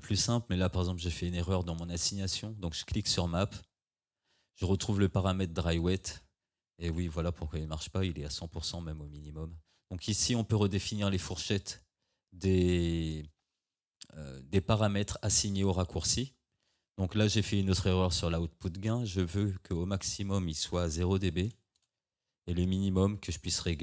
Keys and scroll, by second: 21.4 0, 21.8 Return.